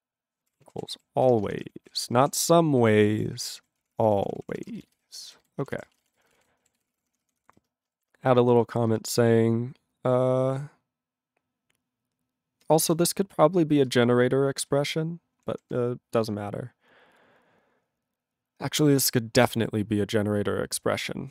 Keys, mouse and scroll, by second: 0.0-2.7 typing, 2.8 ctrl+e, 3.2 ctrl+=, 3.6 ctrl+a, 3.8 ctrl+p, 3.9 ctrl+p, 4.0 ctrl+p, 4.2 ctrl+p, 4.3 ctrl+p, 4.6 ctrl+p, 4.7 ctrl+space, 4.8 ctrl+n, 4.9 ctrl+n, 5.4 ctrl+n, 5.6 ctrl+p, 5.7 ctrl+k, 5.9 ctrl+space, 6.0 ctrl+n, 6.1 ctrl+e, 6.2 ctrl+n, 6.3 ctrl+n, 6.3 ctrl+e, 6.4 ctrl+g, 6.9 ctrl+s, 6.9 ctrl+a, 7.0 ctrl+p, 7.1 ctrl+p, 7.2 ctrl+p, 7.4 ctrl+o, 7.5 Tab, 7.9 #, 8.9 space, 13.0 ctrl+n, 13.9 ctrl+space, 14.0 ctrl+e, 14.6 ctrl+g, 15.4 ctrl+p, 15.5 ctrl+p.